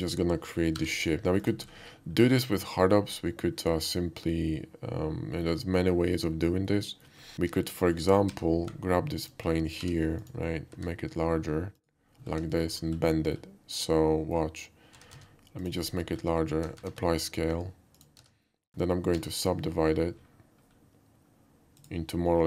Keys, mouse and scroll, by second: 0.7 g, 1.4 click, 1.7 middle click, 4.0-5.5 alt+middle drag, 6.6-7.0 middle drag, 8.3 r, 8.8 ctrl+r, 9.2 click, 9.7 g, 10.2 click, 10.7 s, 11.8 click, 12.3 scroll down 1, 12.5 shift+middle drag, 12.8 scroll up 1, 13.1 shift+middle drag, 13.8-14.3 shift+middle drag, 15.0 s, 15.1 z, 15.2 s, 15.6 click, 15.9 middle drag, 16.0 middle click, 16.8 ctrl+a, 18.0 click, 18.2 Tab, 19.2 ctrl+r, 20.7 middle click, 21.8 click.